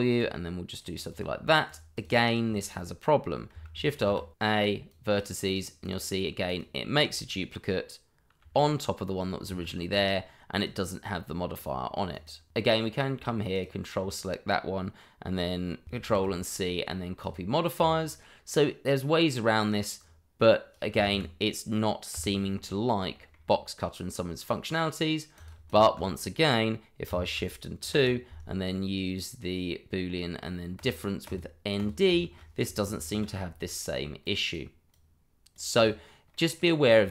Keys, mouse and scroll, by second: 0.1 click, 1.2 double click, 1.6 click, 2.0 double click, 2.5 shift+middle click, 2.6 middle click, 3.9 ctrl+alt+a, 4.9 click, 8.4 g, 9.4 Escape, 10.5 click, 13.5 ctrl+click, 13.7 click, 16.0 ctrl+c, 17.2 click, 18.5 middle click, 22.4 w, 22.6-23.0 scroll down 1, 23.1 shift+middle click, 23.2 middle click, 23.3 shift+middle click, 23.4-25.3 scroll up 1, 25.3 click, 27.8 shift+2, 30.7 click, 31.3 double click, 31.7 click, 32.2 shift+middle click, 32.3 middle click, 33.7 ctrl+alt+a, 34.2 click, 36.3 middle click, 36.8-37.1 scroll down 1.